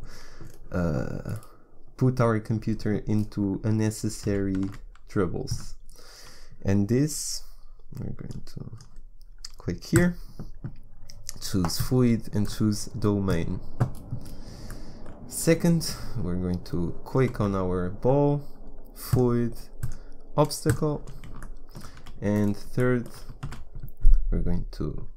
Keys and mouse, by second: 4.2 g, 8.2-14.2 drag, 15.6-17.3 drag, 17.3 z, 19.0-20.7 drag, 21.3 click, 22.0 a, 23.4 shift+a.